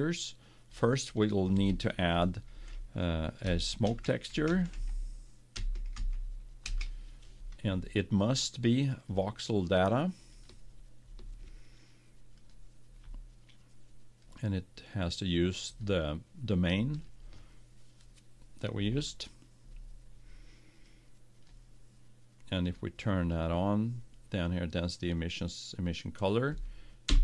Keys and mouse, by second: 0.8-2.6 drag, 9.2-10.9 drag, 12.5-16.1 drag, 20.8-25.1 drag.